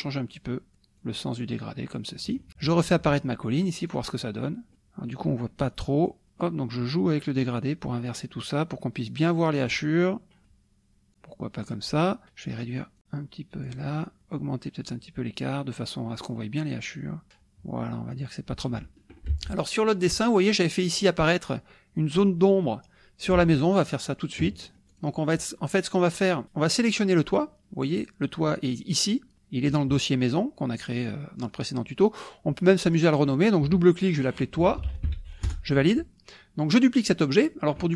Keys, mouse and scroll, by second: 1.0-2.5 drag, 3.9 click, 6.1 click, 7.5-9.9 drag, 10.4 click, 11.1 click, 13.0 click, 14.2-18.8 drag, 19.3 alt+Tab, 23.5 alt+Tab, 24.5 middle click, 24.5-24.9 scroll up 1, 24.9 click, 32.7-34.6 drag, 34.6 t, 34.9 i, 35.0 t, 35.5 Return.